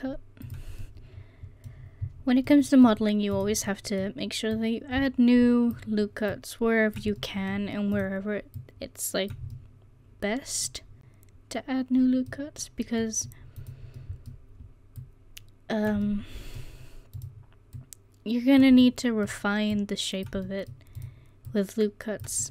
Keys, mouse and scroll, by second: 2.5 middle click, 3.4 right click, 4.2-5.4 middle drag, 4.6-7.2 drag, 4.6 right click, 7.2 middle click, 8.0-9.0 right drag, 9.0 click, 9.6 right click, 9.7 middle click, 11.8-13.1 middle drag, 13.6 right click, 15.0 right click, 16.1-17.2 middle drag, 17.8 right click, 18.8 middle click, 21.0-22.5 right drag.